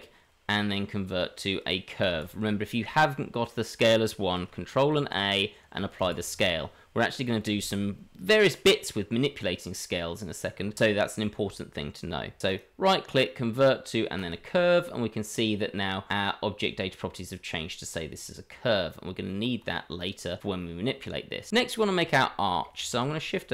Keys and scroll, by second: 18.2 Tab, 22.8 shift+a.